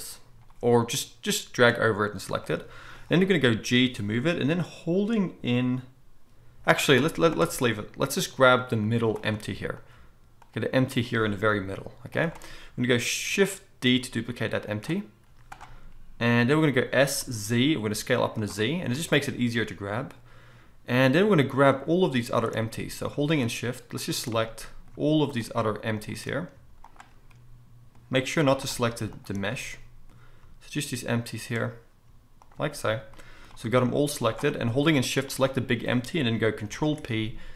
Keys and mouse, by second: 3.7 g, 7.1 z, 8.9 z, 9.8 middle click, 10.3 click, 10.5-11.1 middle drag, 11.5 g, 13.9 shift+d, 15.3 z, 16.9 s, 18.3-21.7 middle drag, 21.7 click, 21.8-23.3 middle drag, 23.3 shift+drag, 23.4-24.0 shift+middle drag, 24.0 shift+click, 24.1-25.9 shift+middle drag, 25.9 shift+click, 26.1-26.8 shift+middle drag, 26.8 shift+click, 26.9-28.6 shift+middle drag, 28.6 shift+click, 28.6-29.1 shift+middle drag, 29.1 shift+click, 29.2-32.4 shift+middle drag, 32.4 shift+click, 32.5-34.5 shift+middle drag, 33.6 g, 35.3 shift+click, 36.7 ctrl+p.